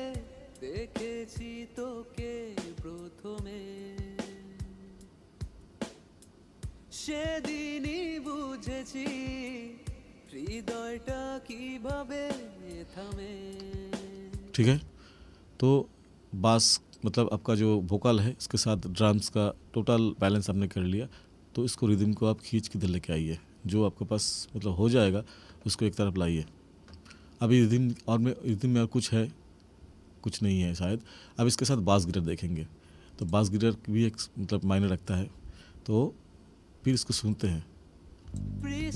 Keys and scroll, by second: 14.6 space, 38.3 space.